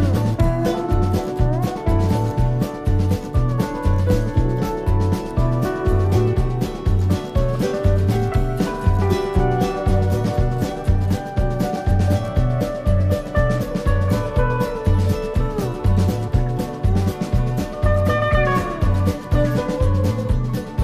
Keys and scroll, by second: 18.3 Up.